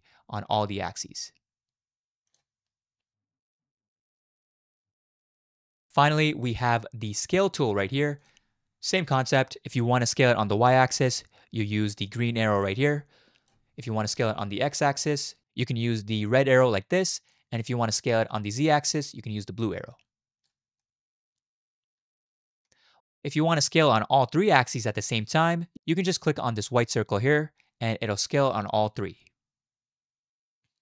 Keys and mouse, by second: 3.6 ctrl+z, 3.9 ctrl+z, 4.3 ctrl+z, 5.2 ctrl+z, 12.2-13.5 drag, 13.8-14.9 middle drag, 16.5 click, 17.9-18.7 middle drag, 19.7 click, 20.8-22.7 middle drag, 25.2 middle click, 27.3-30.0 drag, 30.0-30.8 right drag.